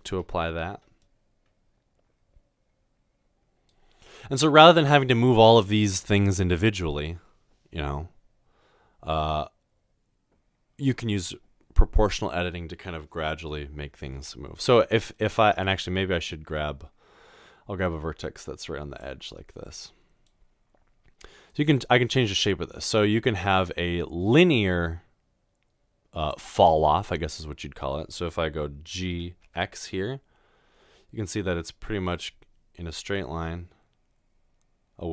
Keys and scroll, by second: 14.2 ctrl+z, 29.1 typing.